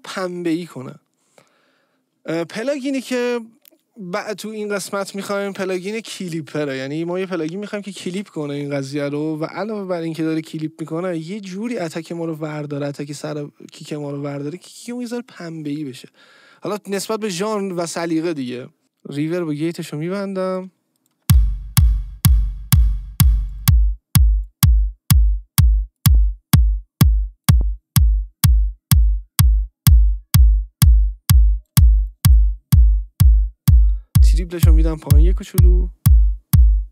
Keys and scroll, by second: 21.2 space.